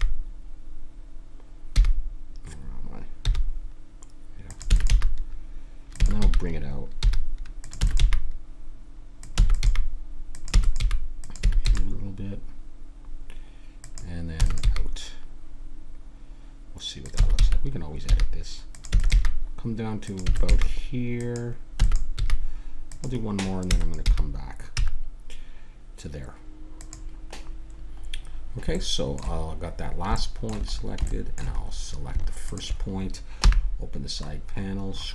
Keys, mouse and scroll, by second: 4.7 e, 4.9 g, 6.0 e, 7.8 e, 8.0 g, 9.4-11.6 typing, 14.3 e, 14.6 g, 17.2 e, 18.9 e, 19.1 g, 20.3 e, 20.4 g, 21.8 e, 22.1 g, 23.6 e, 24.0 g, 27.5-30.8 middle drag, 32.5 right click, 33.4 n.